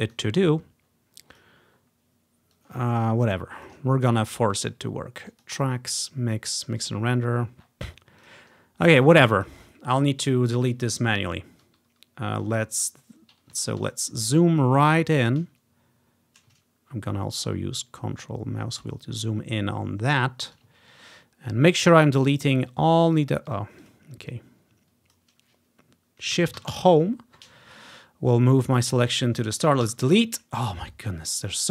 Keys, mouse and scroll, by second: 0.1 click, 0.9-1.4 scroll down 1, 1.4 click, 1.8 scroll up 1, 2.6-3.8 drag, 4.4 ctrl+click, 5.4 click, 7.4-8.3 scroll down 1, 8.3 click, 9.6-10.9 drag, 14.0-14.4 ctrl+scroll up 1, 16.7-17.4 ctrl+scroll up 1, 17.4-18.5 ctrl+scroll up 1, 18.5-19.2 ctrl+scroll up 1, 19.2-19.5 ctrl+scroll down 2, 19.9-20.4 ctrl+scroll up 2, 21.0-22.2 ctrl+scroll up 2, 22.8-24.2 drag, 26.7 shift+Home, 27.4-28.8 scroll down 1, 29.9 Delete, 30.9-31.7 right drag, 30.9 typing.